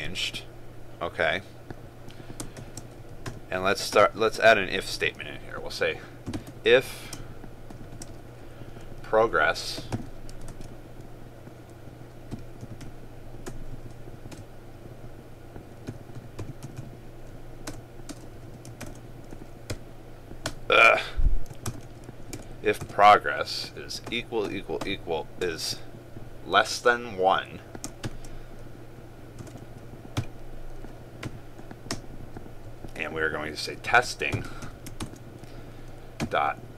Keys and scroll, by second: 18.9 ctrl+space, 21.8 ctrl+space, 35.1 ctrl+space.